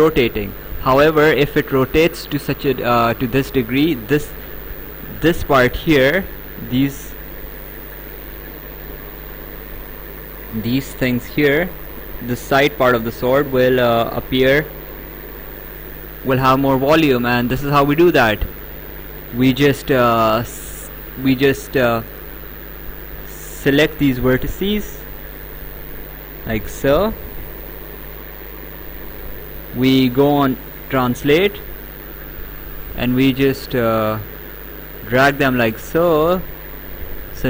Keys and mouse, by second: 5.4 click, 6.5 ctrl+click, 10.9 ctrl+click, 12.1 right click, 14.0 ctrl+click, 15.4 ctrl+click, 17.2 right click, 18.9 right click, 21.4 `, 21.8 Escape, 22.2 click, 23.6 ctrl+click, 23.9 right click, 25.7 ctrl+click, 30.9 click, 31.9 right click, 34.2 click.